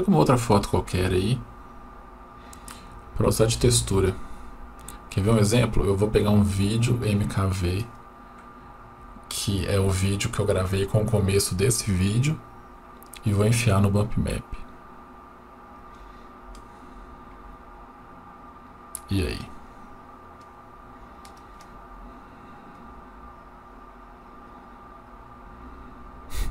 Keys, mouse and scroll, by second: 13.1-16.1 drag, 19.7-21.4 drag, 22.8-23.5 middle drag.